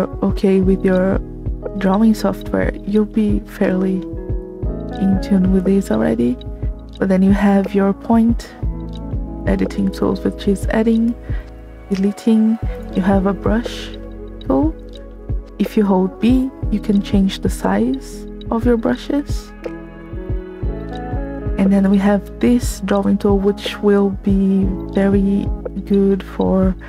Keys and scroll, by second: 16.1 b.